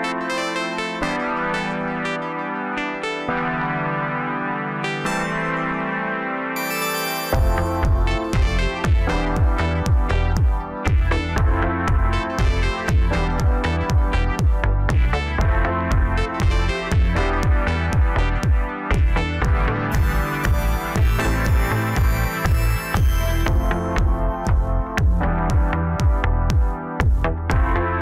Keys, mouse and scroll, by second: 5.5 scroll up 1, 6.4 click, 6.6 click, 7.8 click, 8.0 click, 8.5 scroll down 3, 8.8-9.9 middle drag, 9.9 KP_7, 10.8-11.8 scroll down 2, 11.8-13.9 drag, 15.8-17.3 middle drag, 17.3 1, 17.8-18.1 scroll up 1, 18.1-19.3 middle drag, 19.3 scroll down 2, 19.5-20.8 middle drag, 20.8 KP_3, 21.8-22.8 scroll up 1, 22.8 ctrl+r, 24.1-26.4 middle drag, 26.4-26.7 scroll up 2, 27.2 2, 27.6-28.0 middle drag.